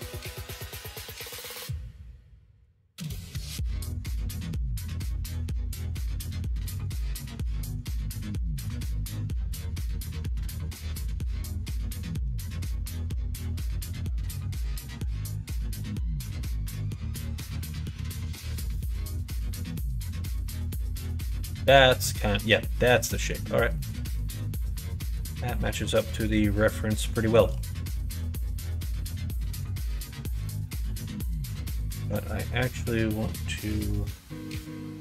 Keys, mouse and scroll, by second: 0.5 alt+click, 1.0 middle click, 2.1 middle click, 3.2 g, 5.7 ctrl+z, 7.0 alt+shift+click, 7.7 g, 10.6 ctrl+z, 11.5 alt+shift+click, 12.2 g, 16.7 alt+click, 17.6 g, 19.4 middle click, 20.4 middle click, 21.0 click, 21.0 Tab, 21.6 middle click, 22.0 middle click, 22.6 middle click, 23.1 middle click, 23.7 middle click, 25.6 middle click, 26.2 middle click, 27.1 shift+middle click, 27.9 middle click, 29.9 middle click, 30.6 middle click, 31.5 middle click, 32.0 Tab, 32.7-34.1 middle drag, 34.4 middle click.